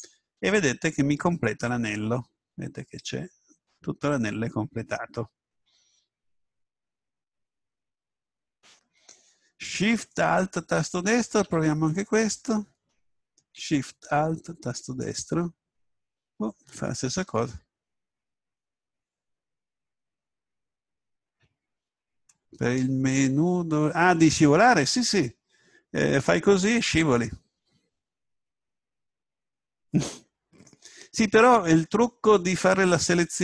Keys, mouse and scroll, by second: 2.2-5.2 middle drag, 10.1-12.2 middle drag, 12.2 a, 15.0 right click, 26.0-27.8 middle drag.